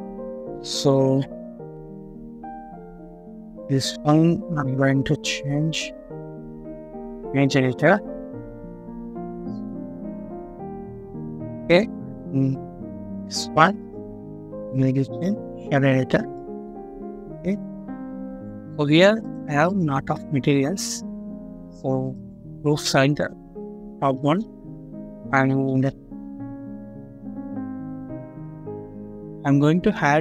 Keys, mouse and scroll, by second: 7.9 scroll up 1, 15.9-16.2 scroll down 1, 16.3 middle click, 17.0-17.4 scroll down 1, 19.6 double click, 20.0-21.1 scroll down 1, 21.2 scroll up 1, 24.1 middle click, 24.5 scroll up 1, 25.4 middle click, 25.9 scroll up 1, 26.6 middle click, 27.0 scroll up 1, 27.4 middle click, 28.0 scroll down 1, 28.4 middle click.